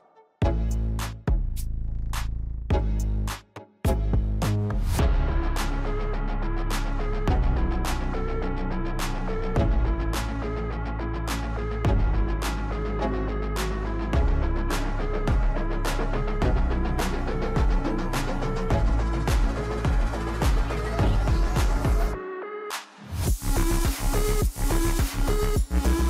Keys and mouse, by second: 1.6 alt+shift+click, 2.2 alt+shift+click, 4.0 e, 6.8 e, 8.7 f, 10.5 middle click, 12.3 Tab, 13.1 middle click, 15.0-16.3 drag, 17.4-18.7 middle drag, 20.7 click, 22.5 click, 24.4 click, 25.1 middle click.